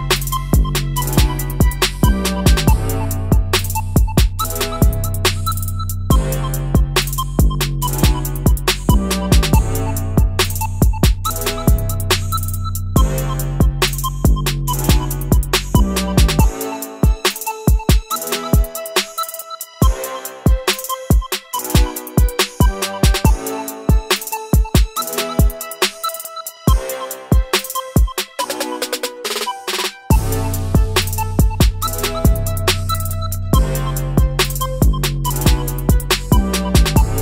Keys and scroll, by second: 21.0 ctrl+z, 34.8 typing, 35.2 Return.